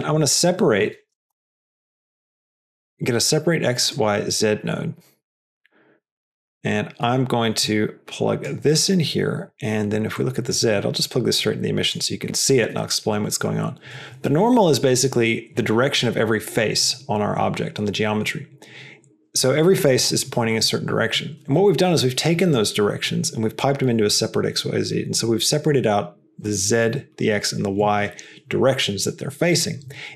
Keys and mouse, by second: 2.2 Down, 4.5 click, 6.3-7.1 drag, 7.5-8.4 drag, 8.6 middle click, 10.1 click, 10.6-12.3 drag.